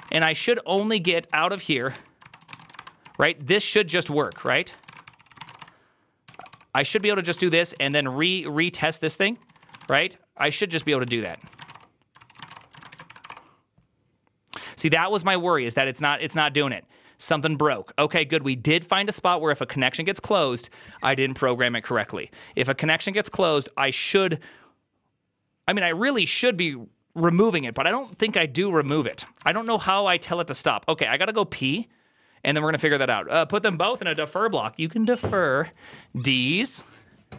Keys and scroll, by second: 0.0-13.6 typing, 12.1 ctrl+c, 12.4 Return, 12.6 ctrl+a, 28.8 ctrl+c, 28.9 ctrl+c, 29.3-30.6 typing.